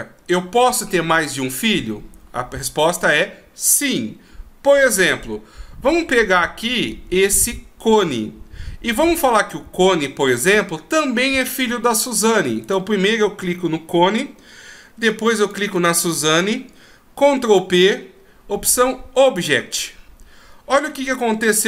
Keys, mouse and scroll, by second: 12.6 right click, 15.4 shift+right click, 17.7 ctrl+p.